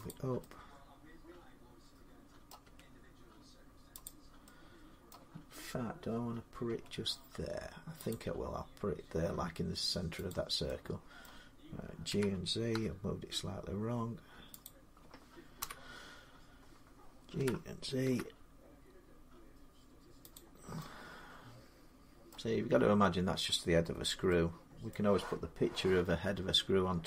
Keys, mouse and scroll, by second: 2.3 middle click, 2.4 g, 3.9 click, 4.9 middle click, 6.5 g, 10.1 click, 11.0 middle click, 11.9-12.5 typing, 14.4 click, 15.4-17.8 typing, 17.4-19.5 drag, 20.2 click, 22.1 middle click, 22.7 g, 24.7 middle click.